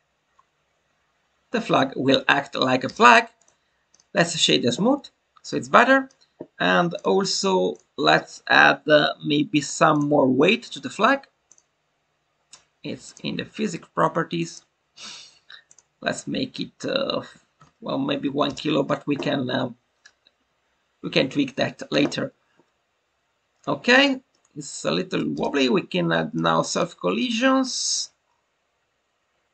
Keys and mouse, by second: 3.3-5.6 right drag, 5.6-6.0 drag, 6.9-7.7 drag, 9.5 click, 9.9-11.6 drag, 14.4 click, 15.7-18.2 drag, 24.3-25.1 middle drag, 26.3 click.